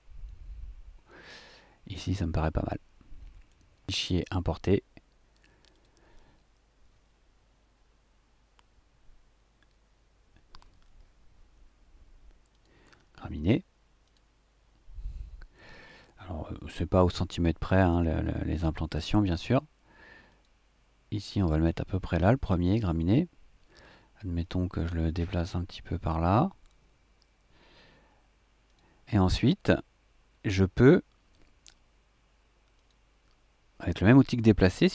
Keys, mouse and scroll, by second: 0.2 middle click, 0.5-1.7 drag, 1.7-3.6 middle drag, 3.6 click, 3.9 click, 5.7-6.0 drag, 12.5 click, 14.0 click, 20.3 click, 21.4 middle click, 22.1 click, 22.2 middle click, 22.3 click, 22.4 middle click, 24.4 click, 28.6 click, 32.7 click.